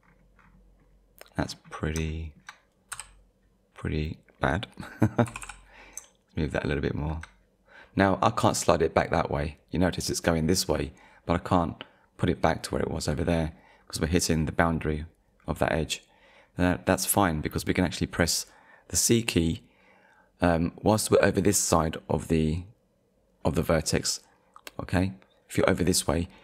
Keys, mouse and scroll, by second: 0.8 scroll up 1, 1.4-1.8 scroll down 1, 2.1 shift+middle click, 2.9 z, 5.3 g.